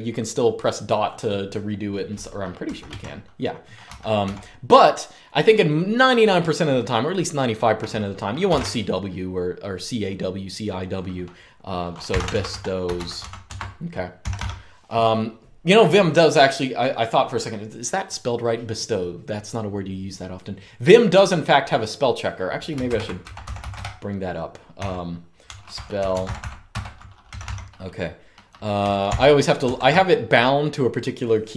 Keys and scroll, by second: 2.1-3.9 typing, 7.9-8.7 typing, 11.6-14.4 typing, 22.6 super+Return, 22.7-27.5 typing, 29.3 super+j.